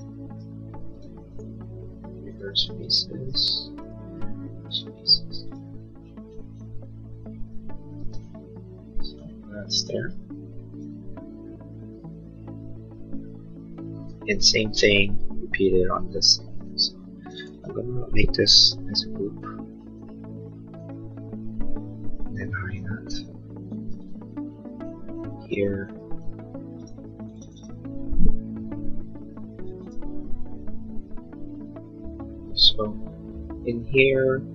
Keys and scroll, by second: 8.2 space, 19.1 g, 22.6 h, 26.5 Escape.